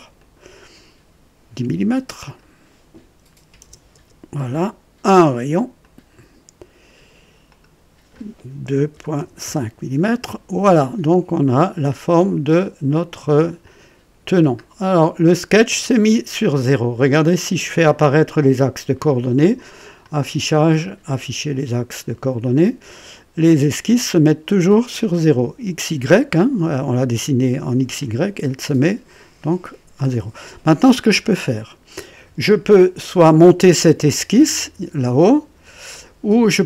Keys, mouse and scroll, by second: 0.1 click, 2.1 click, 3.4 KP_1, 3.6 KP_0, 3.9 KP_Enter, 5.7 click, 7.4 click, 8.6 KP_2, 8.9 KP_Decimal, 9.1 KP_5, 9.4 Return, 10.3-11.0 typing, 12.6 click, 13.6 click, 14.6-14.9 scroll down 2, 15.2 click, 16.5 click, 19.7-20.5 typing, 19.9 click, 22.6 click, 23.6 right click, 24.9-25.6 typing, 28.0 click, 30.1 click, 31.0 scroll down 2, 31.4 right click, 32.9 &, 34.0 click, 35.9 click.